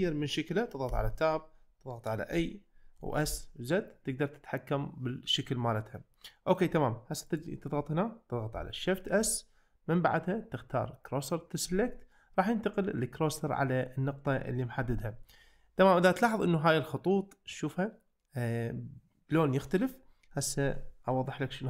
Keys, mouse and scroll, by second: 0.9 Tab, 2.3 a, 3.0 s, 3.3 z, 5.8-6.5 middle drag, 9.2 shift+s, 14.9 `.